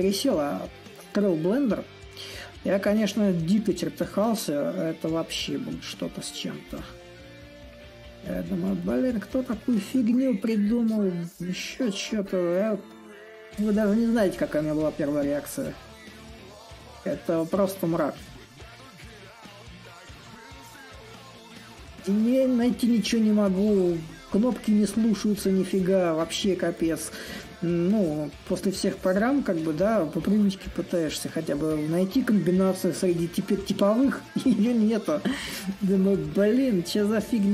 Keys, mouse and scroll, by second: 0.0-2.1 drag, 5.0-10.0 drag, 10.4-15.4 drag, 17.0-20.9 drag, 20.9 s, 22.1-27.1 drag, 27.8-32.8 drag, 33.3-37.5 drag.